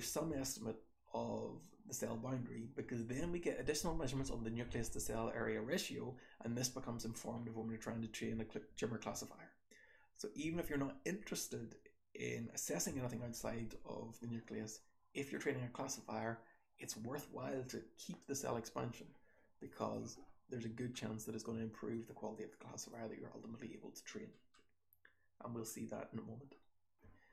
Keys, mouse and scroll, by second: 19.7 click, 19.8 click, 20.3-21.0 scroll down 2, 21.0-21.6 scroll up 2, 22.0-22.9 drag, 22.0-22.9 scroll up 2, 23.4 scroll up 1, 23.9 scroll up 2, 24.6-26.5 scroll up 2, 26.5-27.3 scroll down 2.